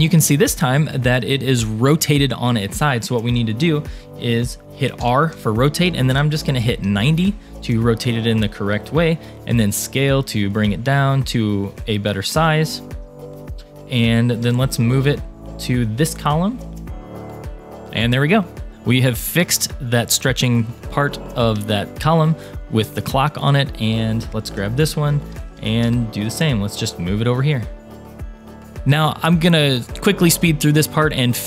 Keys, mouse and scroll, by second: 5.0 r, 9.3 s, 12.8 shift+middle click, 13.1 scroll up 3, 13.5 shift+middle click, 14.4 g, 17.8 click, 18.0-20.3 middle drag, 20.8 middle click, 21.2 shift+middle click, 21.6 middle click, 22.9 click, 24.9 a, 25.5 g, 28.5 scroll up 1, 28.8 click, 29.6-30.2 scroll down 1.